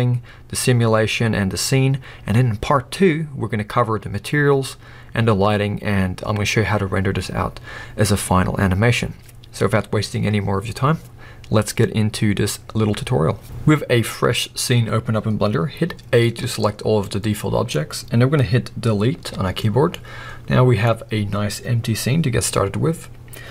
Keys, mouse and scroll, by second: 16.3 a, 17.1-19.2 middle drag, 19.2 Delete, 19.9-23.5 middle drag.